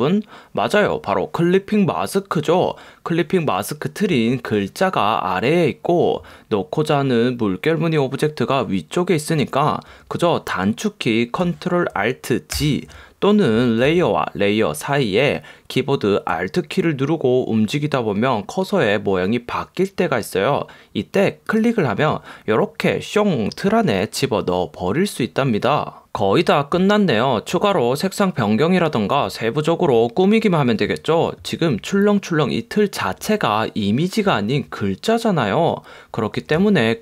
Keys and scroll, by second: 12.7 alt+super+g, 14.0 super+z.